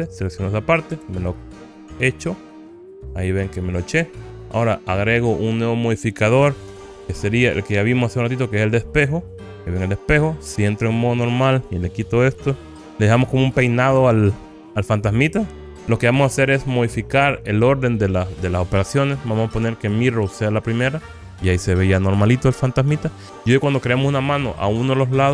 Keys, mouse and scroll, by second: 1.0 Delete, 3.0-5.3 middle drag, 7.3-9.5 drag, 10.8 Tab, 13.0 alt+z, 14.4-15.8 middle drag, 16.8 click, 20.0-21.2 drag, 22.0-23.7 middle drag.